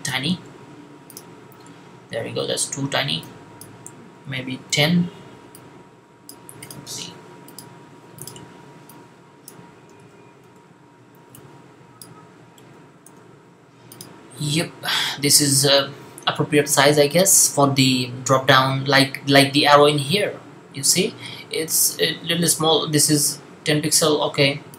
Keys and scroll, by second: 0.1 typing, 4.1-4.5 typing, 9.8-10.3 typing, 12.4-12.9 typing.